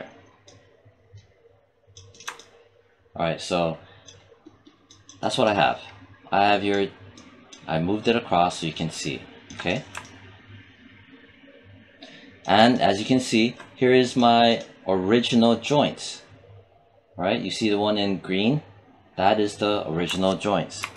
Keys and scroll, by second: 20.6 alt+5.